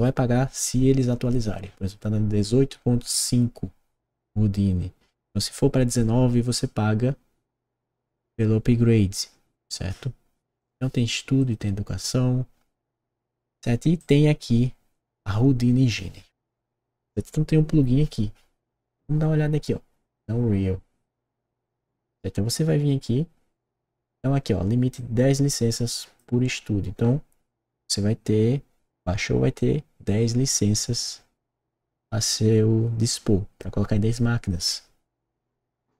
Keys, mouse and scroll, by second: 10.5 click, 11.3 click, 13.9 click, 24.9-26.1 drag.